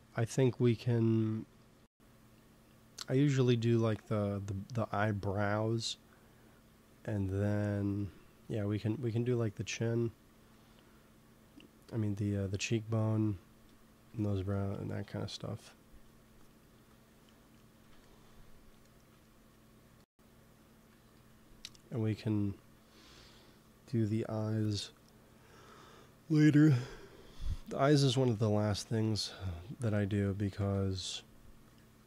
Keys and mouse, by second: 5.7-7.9 middle drag, 14.0 middle click, 16.3-18.2 drag, 27.3 f, 29.2 x, 30.5 f, 31.6-32.0 drag.